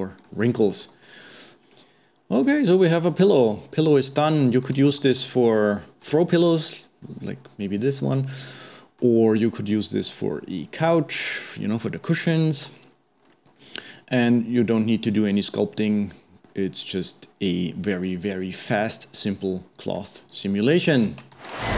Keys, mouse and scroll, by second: 0.3-1.3 middle drag, 1.3 scroll down 2, 1.5-13.2 middle drag, 13.2-13.5 scroll down 2, 13.5 scroll up 1, 19.8-20.2 scroll down 2, 20.2-21.3 scroll up 1.